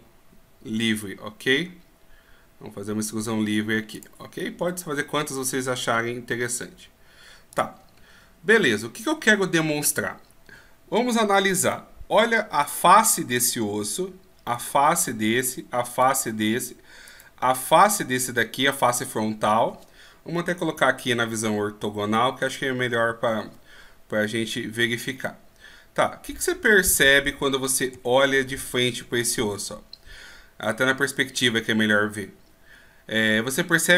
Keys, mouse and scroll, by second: 8.0 scroll down 2, 8.7 scroll up 1, 12.6 right click, 14.5 right click, 17.6-19.6 scroll up 1, 20.8 KP_5, 23.0 KP_1, 25.2 middle click, 27.9 KP_1, 28.7 KP_5.